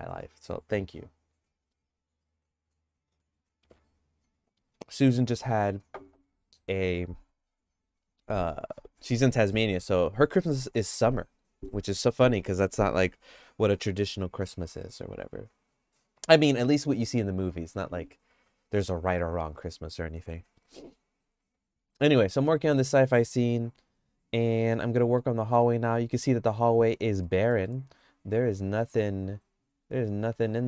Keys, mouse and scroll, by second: 22.2 middle click, 22.4 shift+middle click, 25.0 middle click, 25.6-26.7 shift+middle drag, 27.2 middle click, 27.6 shift+middle click, 28.5 middle click, 29.4 click, 30.2-30.6 shift+middle drag.